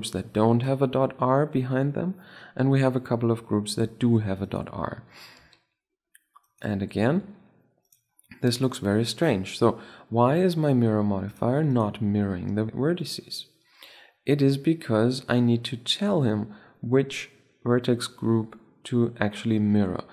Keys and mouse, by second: 1.2-4.1 middle drag, 4.2-6.1 right drag, 5.1 r, 6.8 r, 11.0-11.8 drag, 11.8-13.0 right drag, 12.7-14.3 drag, 14.3 middle click, 14.3 click, 14.5-16.6 middle drag.